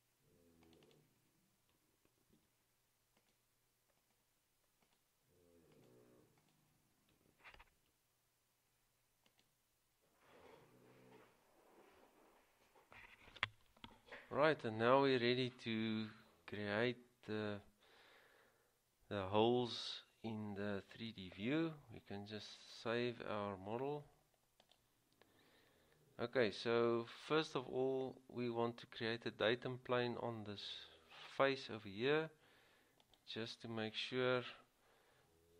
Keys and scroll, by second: 2.5 ctrl+c, 7.9 ctrl+v.